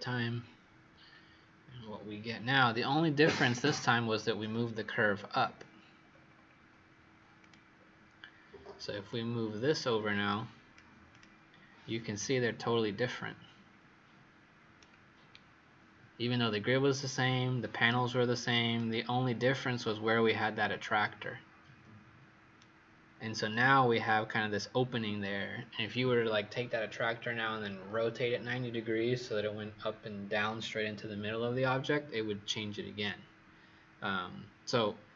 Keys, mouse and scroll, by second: 4.8-6.0 scroll down 4, 6.0-7.3 scroll up 5, 7.3 click, 12.1 right click, 15.4-17.6 scroll down 1, 17.6-18.0 scroll up 2, 18.7 right click.